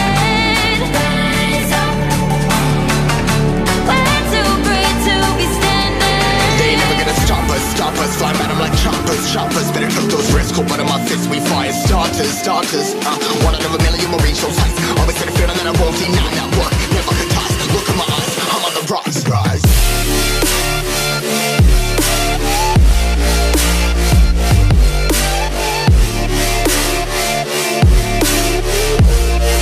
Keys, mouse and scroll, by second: 19.2-19.7 scroll up 1, 19.7 click, 25.4 scroll down 1, 25.8 click, 26.4 Tab, 27.1 click, 27.8 c, 28.0 Tab, 29.0 v.